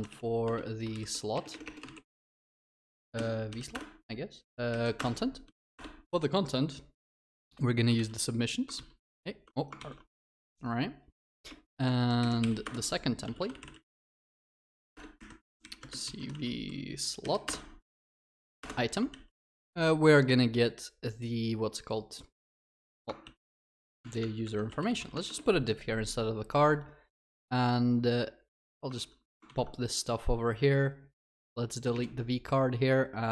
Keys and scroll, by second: 2.1 Return, 8.0 ctrl+x, 8.8 ctrl+v, 9.1 ctrl+z, 9.8 ctrl+v, 13.9 ctrl+z, 14.0 Tab, 19.1 ctrl+s, 23.2 Tab, 25.1 Tab, 29.5 ctrl+v.